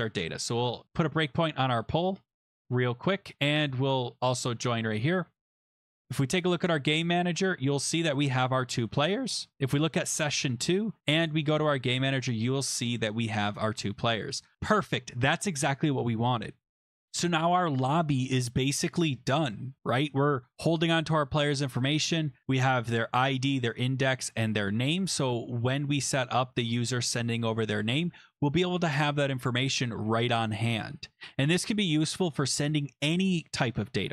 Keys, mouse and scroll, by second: 2.4 click, 2.4 scroll, 3.6 click, 5.4 scroll, 6.0 click, 7.9 click, 9.9 click, 10.5-11.1 scroll, 11.4 click, 12.6 click, 24.6 click.